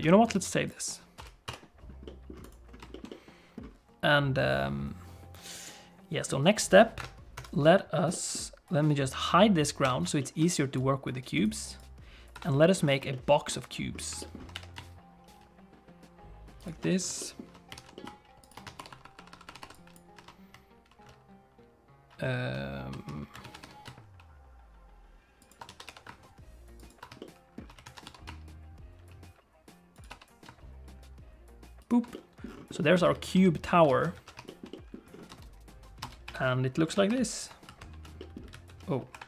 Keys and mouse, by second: 0.0 ctrl+s, 2.0 middle click, 2.4 click, 2.9 shift+middle click, 3.0 middle click, 6.9 KP_7, 7.3 KP_1, 8.1 middle click, 9.8 h, 10.1 shift+middle click, 10.5 click, 11.3 click, 11.6 click, 12.3 KP_7, 13.1 click, 14.1 click, 14.5 g, 17.1 shift+click, 17.7 alt+d, 18.7-19.6 typing, 19.8 click, 23.5 alt+d, 25.6 a, 25.8 g, 27.1 shift+middle click, 28.0 alt+d, 30.4 g, 32.1 middle click, 32.7 middle click, 32.9 Tab, 33.2 alt+z, 33.8 alt+z, 34.1 alt+a, 34.4 shift+middle click, 34.7 middle click, 35.2 space, 36.1 space, 36.2 KP_5, 37.0 shift+h, 37.8 alt+h, 38.1 middle click, 38.5 alt+a, 39.1 KP_5.